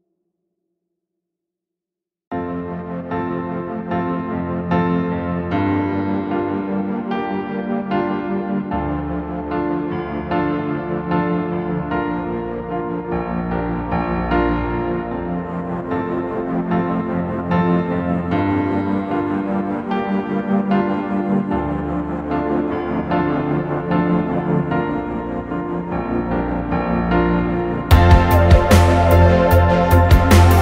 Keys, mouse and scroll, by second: 1.6 space, 3.7-4.1 typing, 17.1-17.4 scroll down 1, 17.4 click, 17.8-18.2 scroll down 2, 19.4 scroll down 2, 23.5 space, 27.3 t, 28.8 scroll down 2, 29.1 click, 29.5-30.6 typing.